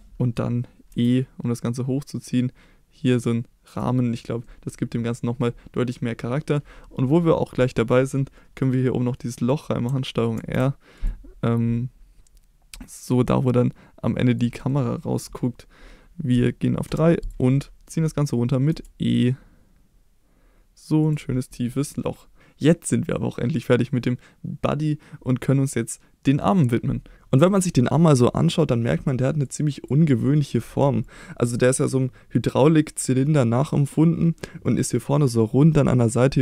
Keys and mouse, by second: 0.9 e, 3.7 click, 4.1 click, 4.4 middle click, 5.1 middle click, 14.3 click, 14.7 middle click, 16.9 3, 17.5-17.9 middle drag, 18.7 e, 21.0 click, 21.5 middle click, 21.9 click, 22.4 Tab.